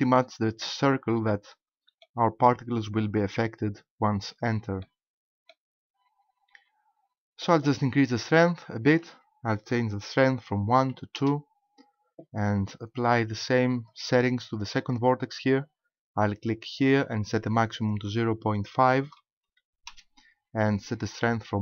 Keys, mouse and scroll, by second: 4.8 middle click, 6.0 scroll down 1, 8.9 click, 13.8 right click, 16.8 click, 17.8 click.